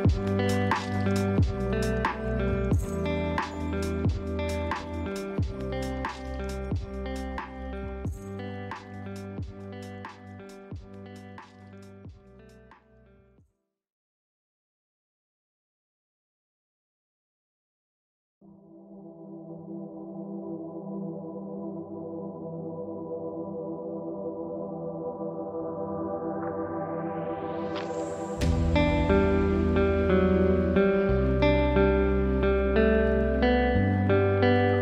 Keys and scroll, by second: 5.7 ctrl+space, 12.9 ctrl+;, 13.6 ctrl+space, 23.0 ctrl+space, 27.0 ctrl+v.